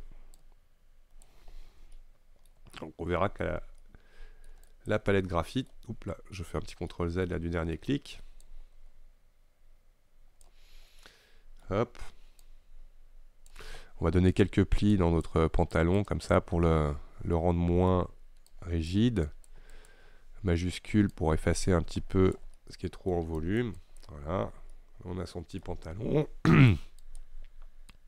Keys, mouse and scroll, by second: 0.4-2.0 drag, 2.0-4.7 shift+middle drag, 4.7 click, 5.4-6.6 middle drag, 6.6 ctrl+z, 7.0-8.5 middle drag, 8.5-10.8 drag, 10.8-11.1 scroll down 2, 11.1-12.5 middle drag, 12.5-17.4 drag, 17.4-18.6 middle drag, 18.6-22.6 drag, 22.6 middle click, 23.5 click, 24.4 scroll down 2, 24.5 scroll up 1, 24.8-26.6 middle drag, 26.6-28.0 drag.